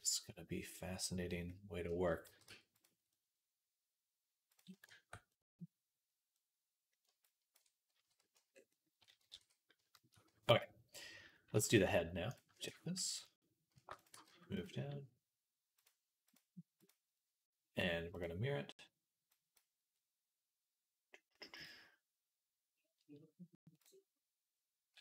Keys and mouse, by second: 1.3 middle click, 2.1 g, 2.9-5.3 middle drag, 4.4-6.2 drag, 6.3-11.4 drag, 7.9 w, 9.2 ctrl+s, 12.2-15.6 shift+middle drag, 13.6 shift+d, 14.0 g, 15.6-19.5 drag, 21.4-23.7 drag, 24.9 Tab.